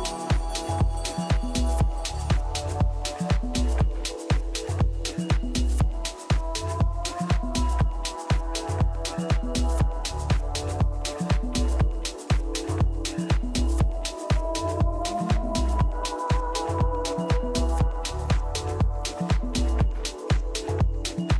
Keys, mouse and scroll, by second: 1.2 KP_1, 3.6 z, 5.0 middle click, 5.6 z, 6.2 a, 6.6 a, 8.6 z, 9.0 z, 9.5 a, 9.8 a, 10.3-11.9 right drag, 11.0 a, 12.2 click, 13.0 a, 13.3 a, 13.7 right click, 16.1-20.3 right drag, 20.1 KP_1, 20.8 z.